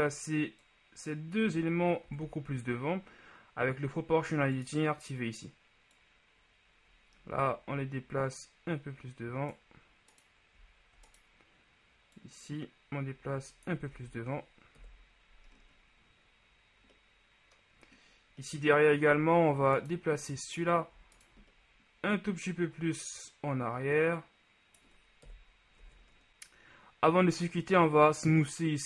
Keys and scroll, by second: 2.2 ctrl+z, 14.1 Tab, 14.9 KP_1, 19.3 Tab, 25.5 KP_1, 26.0 Tab.